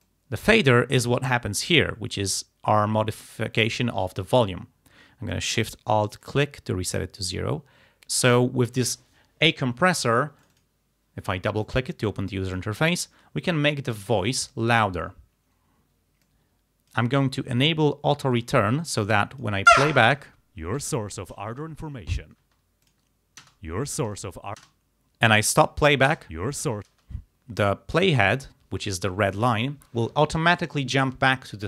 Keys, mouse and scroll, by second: 0.1 click, 1.3-4.0 drag, 6.3 alt+shift+click, 10.5 click, 11.7-12.8 drag, 16.3 click, 18.4 click, 19.2 click, 19.8 space, 20.9 ctrl+scroll up 2, 22.5 space, 22.9 click, 23.5 space, 24.2 ctrl+scroll down 2, 24.7 ctrl+space, 26.1 space, 26.9 space.